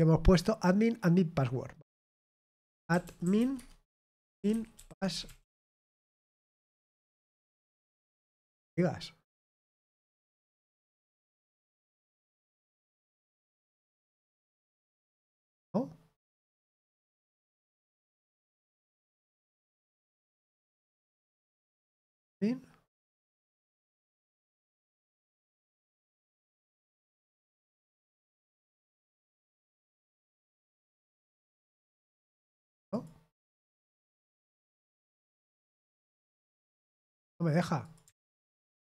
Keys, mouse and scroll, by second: 2.6-6.1 typing, 3.5 Tab, 6.1 Return, 9.4 BackSpace, 11.1 click, 13.2 click, 14.4 click, 16.8 click, 18.5 click, 19.3 click, 21.6-25.5 drag, 26.1-28.0 drag, 28.6 click, 30.3 click, 31.0 ctrl+v, 31.5 click, 32.7 click, 36.1 click, 37.8 click.